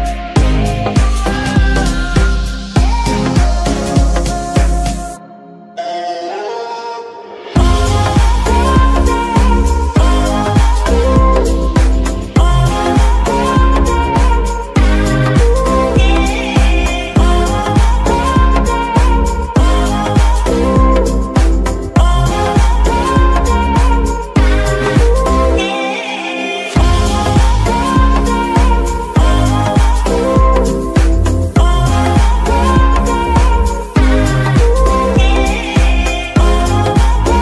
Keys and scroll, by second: 3.1-5.4 typing, 14.9 KP_3, 15.4 g, 15.5 z, 17.4 shift+g, 17.5 shift+z.